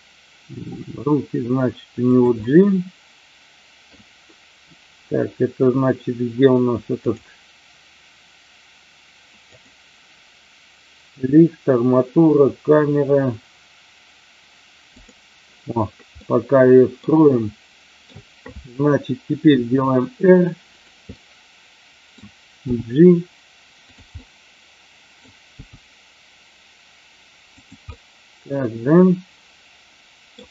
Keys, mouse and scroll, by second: 0.6 g, 2.1 click, 2.3 scroll up 1, 2.4-3.9 middle drag, 9.6 click, 14.9 click, 16.2-17.0 middle drag, 17.3 scroll up 1, 17.4 shift+middle click, 19.4 r, 20.7 click, 21.0-22.0 middle drag, 22.5 g, 23.8 click, 24.0-25.2 middle drag, 25.4 g, 27.5 click, 27.8-30.4 middle drag.